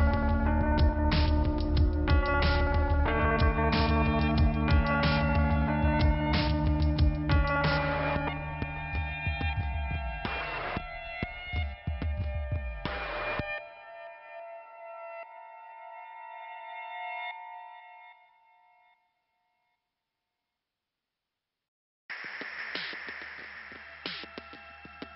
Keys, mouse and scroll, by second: 0.8 click, 0.9 click, 2.4 click, 4.7-5.0 scroll down 1, 6.1 click, 6.5 click, 7.3 scroll up 1, 8.3 click, 8.3 click, 8.6 click, 8.7 double click, 8.9 double click, 9.7 click, 9.8 click, 10.3 click, 10.4 click, 11.1 scroll down 1, 12.2 click, 17.0 scroll up 1, 18.3 click, 19.9-20.9 scroll down 2.